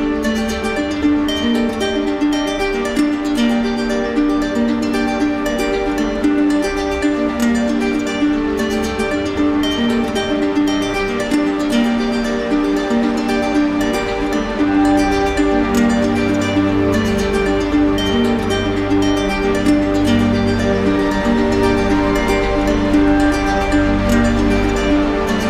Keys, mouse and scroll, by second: 0.9 ctrl+click, 2.0 ctrl+click, 2.6 ctrl+click, 5.2 alt+click, 6.9 click, 7.0 ctrl+z, 9.0 click, 10.2 ctrl+click, 10.6 q, 12.6 click, 14.3 right click, 15.7 right click, 16.9 right click, 17.6 right click, 17.9 shift+right click, 18.7 shift+right click, 18.7 r, 20.3 alt+click, 23.5 click, 24.3 click, 24.8 click.